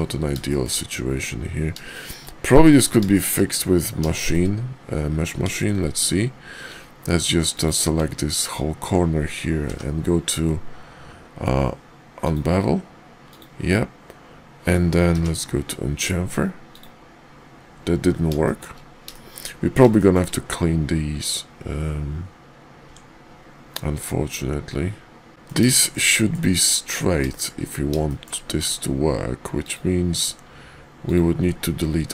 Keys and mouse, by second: 0.5 shift+middle click, 1.9 shift+middle click, 2.7 middle click, 3.1 shift+middle click, 4.1 shift+middle click, 5.4 Tab, 7.5 click, 18.4 shift+middle click, 19.1 shift+middle click, 20.0 shift+middle click, 22.8 Tab, 23.9 Tab, 25.3 middle click, 25.7 shift+middle click, 26.1 shift+middle click, 27.2 shift+middle click, 28.1 shift+middle click, 28.6 Tab, 30.9 ctrl+click, 31.9 x.